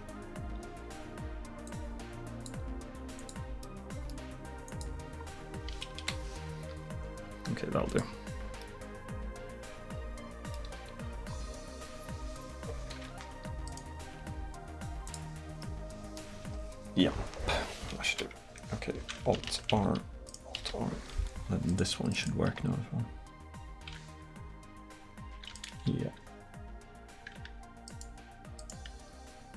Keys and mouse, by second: 3.7-6.0 middle drag, 6.0 KP_1, 6.8 r, 10.8 middle drag, 14.2 r, 18.1 KP_1, 19.8 alt+r, 20.3 right click, 20.6 alt+r, 22.6 r, 25.6-27.4 right drag, 25.8 r, 29.1 r.